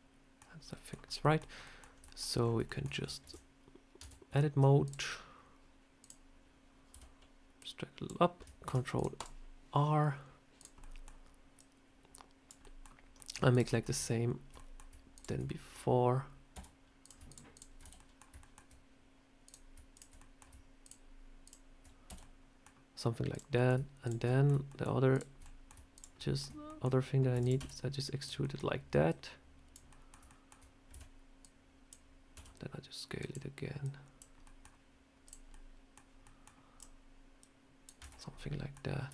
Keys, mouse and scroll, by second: 1.5 middle click, 1.9 shift+middle click, 2.3 scroll up 3, 2.5 shift+middle click, 3.1 ctrl+r, 3.9 Tab, 4.7 click, 5.9 click, 6.8 a, 7.5 click, 8.5 ctrl+r, 10.5 click, 10.7 middle click, 11.5 click, 12.5 middle click, 13.1 middle click, 13.4 click, 13.6 middle click, 14.4 middle click, 15.4 middle click, 16.4 f, 16.9 click, 17.2 shift+click, 17.7 shift+click, 17.7 f, 17.9 middle click, 18.3 shift+middle click, 19.3 click, 19.8 shift+click, 20.1 middle click, 20.7 shift+click, 21.4 shift+click, 21.9 f, 22.1 middle click, 23.2 click, 23.4 middle click, 23.9 shift+click, 24.1 middle click, 24.5 shift+middle click, 25.0 shift+click, 25.3 middle click, 25.8 shift+click, 26.1 shift+middle click, 26.5 middle click, 27.2 e, 27.4 s, 28.3 middle click, 29.0 click, 29.8 middle click, 30.1 shift+middle click, 30.8 a, 31.3 click, 32.2 s, 33.7 click, 34.3 middle click, 35.1 click, 35.4 middle click, 36.1 middle click, 36.6 click, 37.3 click, 37.9 Tab, 38.0-38.5 scroll down 3, 38.3 middle click, 39.0 a.